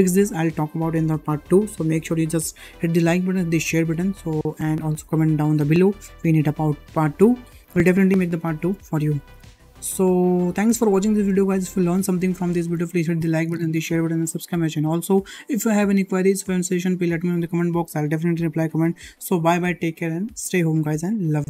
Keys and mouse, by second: 7.4-7.8 middle drag, 8.4 shift+middle click, 9.3 ctrl+Tab, 10.1-10.4 middle drag, 10.7 shift+middle drag, 11.1 click, 12.6 n.